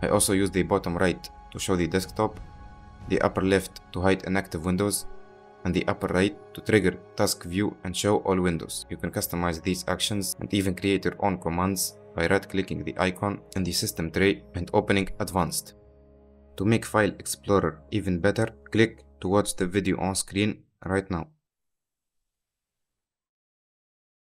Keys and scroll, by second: 2.8 d.